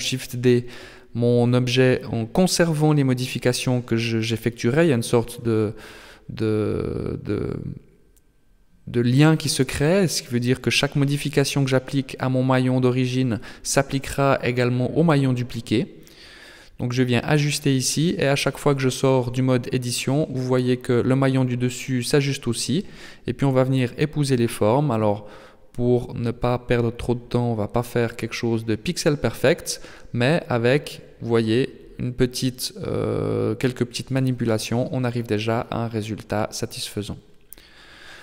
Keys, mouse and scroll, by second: 0.4 Tab, 1.0 Tab, 1.4 right click, 1.8 Tab, 2.3-4.2 scroll up 3, 5.0 right click, 5.8 shift+right click, 6.1 right click, 6.6 shift+right click, 7.3 g, 10.6 alt+right click, 11.2 s, 12.7 alt+right click, 13.2 s, 15.9 right click, 17.2 shift+right click, 17.7 shift+right click, 18.5 g, 21.1 Tab, 22.2 Tab, 23.3 g, 24.6 Tab, 26.8-27.8 scroll down 7, 28.2 right click, 29.1 a, 33.6 right click, 34.4 x, 35.4 right click, 36.4 Tab, 38.0 KP_1.